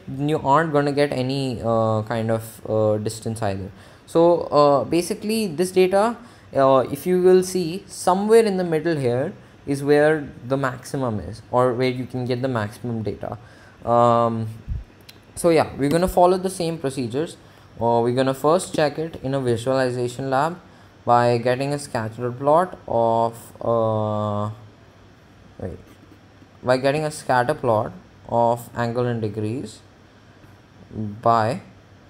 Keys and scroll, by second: 6.6 Down, 9.6 Up, 17.5 Home.